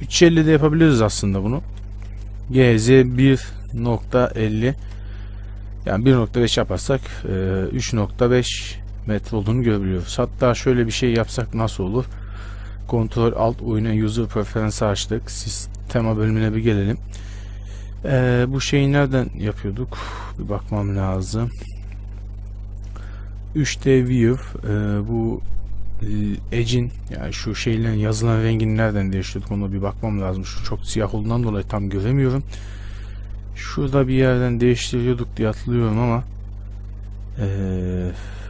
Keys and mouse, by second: 0.7 ctrl+z, 1.3 ctrl+z, 1.7 ctrl+z, 2.7 g, 6.9 a, 7.2 a, 10.0 Tab, 11.2 Tab, 12.1 ctrl+alt+u.